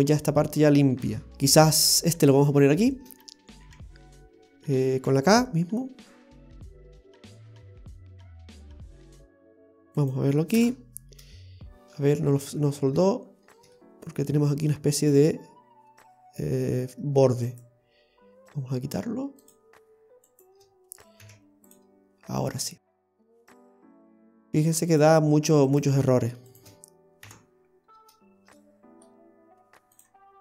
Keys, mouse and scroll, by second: 1.3 shift+middle click, 1.3 right click, 12.4 ctrl+z, 12.7 ctrl+z, 13.2-13.8 scroll up 4, 13.7 middle click, 14.7 middle click, 15.8-16.2 scroll down 1, 16.4 scroll down 1, 16.6-17.4 scroll up 3, 17.4 right click, 19.4 click, 20.3 right click, 21.2 x, 22.1-22.8 scroll down 3, 22.8 middle click, 22.8 x, 23.1-24.2 scroll up 1, 24.2 scroll up 1, 24.9 click, 25.7 right click, 26.5 shift+right click, 27.2 i, 27.6-27.9 scroll down 1, 28.5 middle click, 28.5 scroll down 2, 30.0 click.